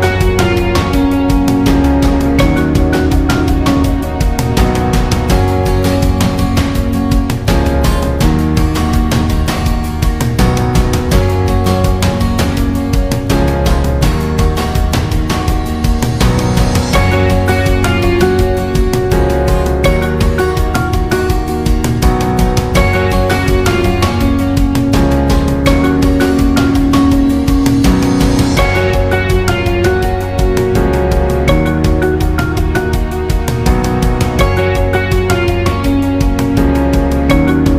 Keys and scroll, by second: 29.5 ctrl+d, 29.8 ctrl+d, 30.1 ctrl+d, 30.4 ctrl+d, 30.7 ctrl+d, 31.0 ctrl+d, 31.2 ctrl+d, 31.5 ctrl+d, 31.8 ctrl+d, 32.1 ctrl+d, 32.5 ctrl+d.